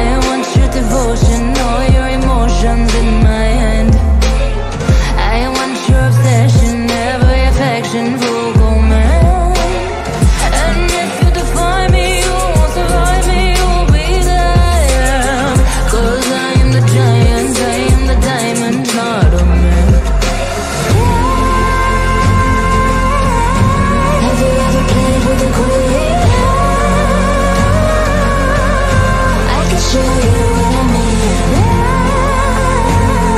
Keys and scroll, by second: 13.5 F3, 15.0 Escape, 21.8 F3, 22.0 Escape, 25.7 ctrl+q, 30.7 Delete, 33.1 Delete.